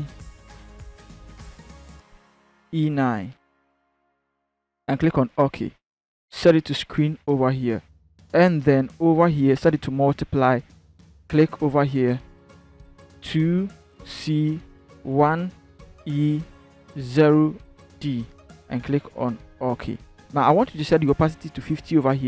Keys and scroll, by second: 2.4 e, 3.0 9, 13.1 2, 13.7 c, 14.9 1, 15.4 e, 16.9 0, 17.5 d.